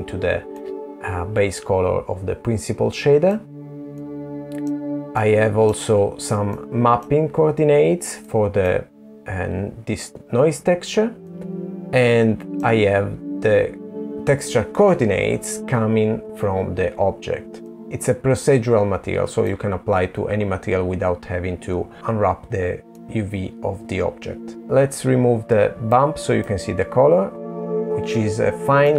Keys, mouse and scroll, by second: 1.8 middle click, 2.9 middle click, 4.3 middle click, 6.1 middle click, 8.1-9.0 scroll up 4, 9.0 middle click, 15.4 middle click, 16.9 middle click, 22.0 middle click, 24.6 click, 26.7 middle click.